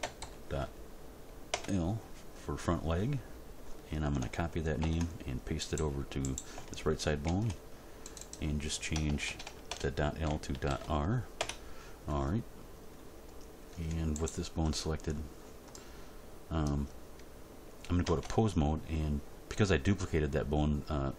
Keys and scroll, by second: 0.2 shift+l, 1.5 Return, 4.8 ctrl+c, 7.2 ctrl+v, 8.9 BackSpace, 10.6 shift+r, 11.4 Return, 18.0 Tab.